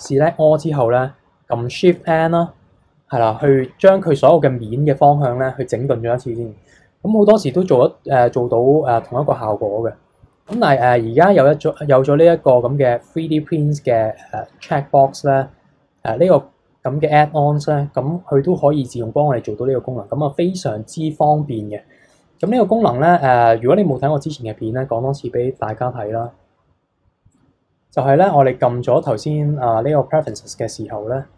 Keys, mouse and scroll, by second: 2.0 shift+n, 3.4 click, 10.5 Tab, 11.6 click, 19.8 scroll down 2, 20.0-22.4 middle drag, 22.4-25.5 drag, 29.0-30.3 drag.